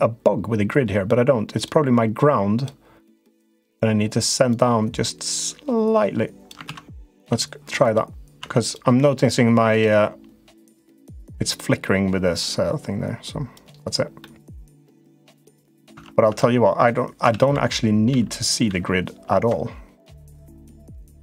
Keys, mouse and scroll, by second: 3.1 click, 4.2-6.2 drag, 6.4 ctrl+z, 6.8 Tab, 8.1 Tab, 8.3 click, 10.6 click, 12.0 click, 13.9 middle click, 15.3 Tab, 15.7 Tab, 16.0 Tab, 17.1 ctrl+z, 17.3 ctrl+z, 17.9 ctrl+z, 18.5 ctrl+z, 20.9 click.